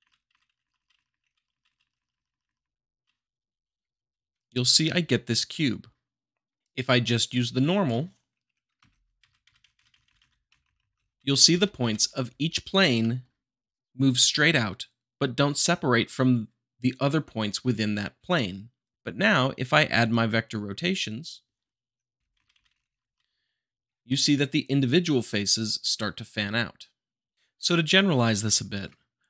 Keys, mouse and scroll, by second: 3.8 middle click, 4.4 `, 6.6-7.6 drag, 8.7 shift+Left, 9.2 Right, 10.6 Left, 11.2 Right, 12.9 Up, 13.0 middle click, 20.1-21.1 drag, 21.9 Up, 22.4 Right, 24.0-25.1 middle drag.